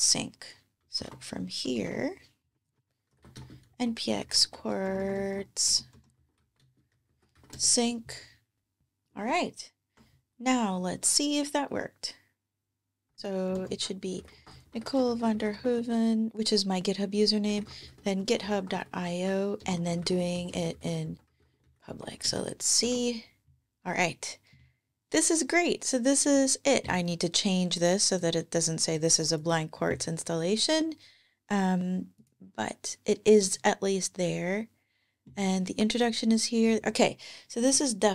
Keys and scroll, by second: 0.7 super+Tab, 0.8 ctrl+`, 1.6 ctrl+`, 2.7-4.5 typing, 9.0 super+Tab, 13.0 super+t, 13.1-15.1 typing, 17.1-20.3 typing, 22.1 super+Return, 22.7 ctrl+Tab.